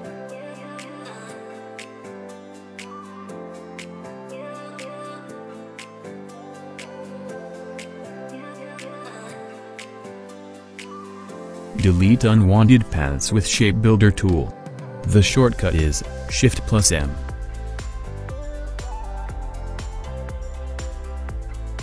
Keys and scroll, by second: 3.9 ctrl+a, 10.0 v, 11.0 Delete, 11.7 ctrl+z, 12.5 ctrl+a, 14.3 v, 15.4 Delete, 19.3 ctrl+g, 19.8 r, 21.7 ctrl+d.